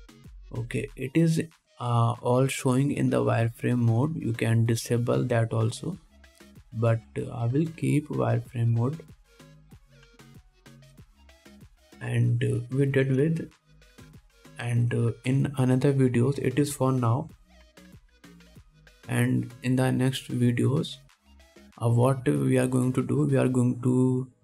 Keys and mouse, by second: 4.4-5.3 drag, 11.0-21.5 middle drag, 13.3 click, 13.3 right click, 13.7 click, 13.7 right click, 15.3-24.4 drag, 15.3-21.5 right drag, 22.8 middle click, 22.8 right click.